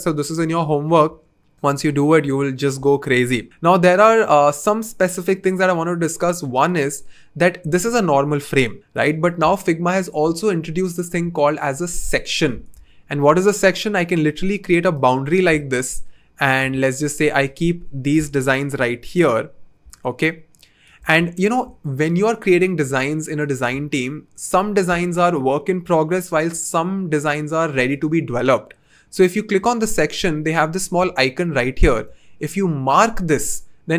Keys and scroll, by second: 15.7 v.